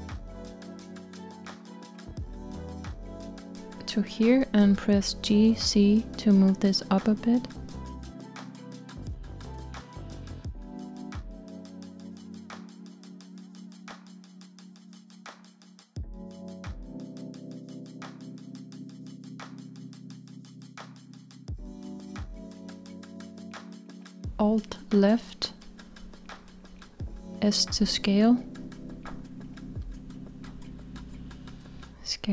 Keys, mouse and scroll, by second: 14.6-15.0 z, 16.3-17.9 middle drag, 17.9 scroll up 1, 22.3 click, 22.6 click, 26.2 alt+click, 29.1 s.